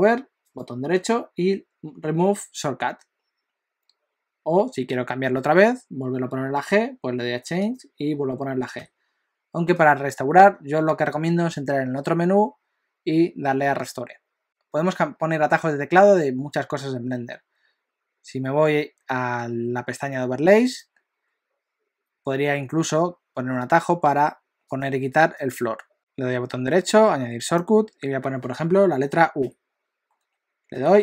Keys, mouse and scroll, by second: 0.4 right click, 20.7 click, 26.0 click, 30.2 u, 30.7 u.